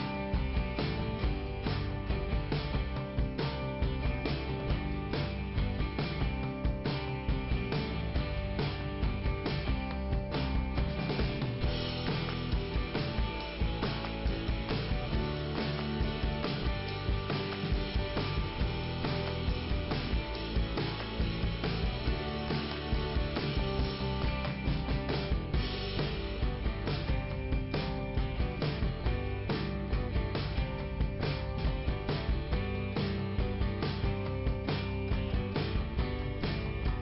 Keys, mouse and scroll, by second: 3.0 click, 6.1 scroll up 2, 6.9 click, 12.4 click, 13.3 middle click, 14.7 click, 17.3 click, 18.6 click, 19.2 scroll down 2, 21.2 click, 21.2 scroll down 1, 27.2 middle click, 28.7 click, 31.5 click, 31.7 click, 31.8 double click, 33.6 click, 33.9 click, 35.2 middle click.